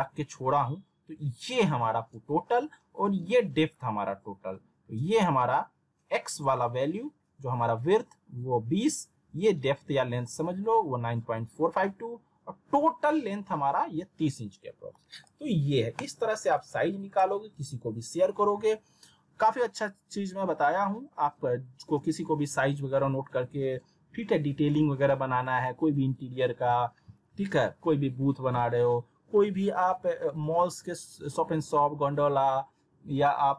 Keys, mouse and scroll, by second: 14.9 middle click, 15.2 z, 15.6 scroll down 1, 16.0 click, 17.6 z.